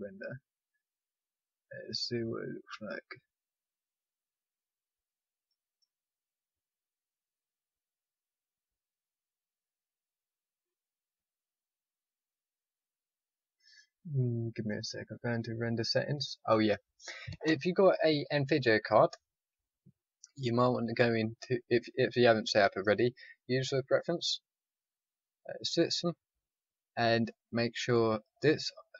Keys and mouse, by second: 16.2 click.